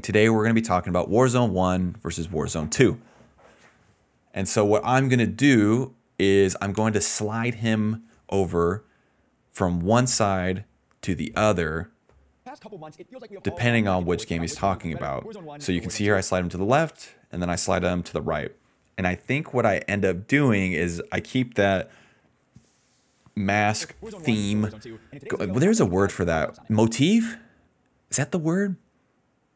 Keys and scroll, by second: 12.2 space, 12.5 d, 13.5-14.5 typing, 16.1 space, 23.6 space, 25.2 s, 26.3 d, 27.1 s, 27.2 space, 29.3 space.